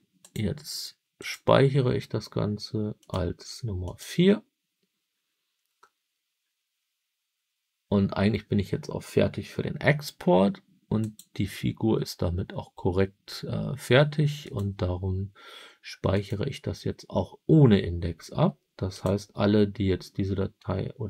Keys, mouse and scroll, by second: 0.1-1.5 drag, 10.9-14.6 drag.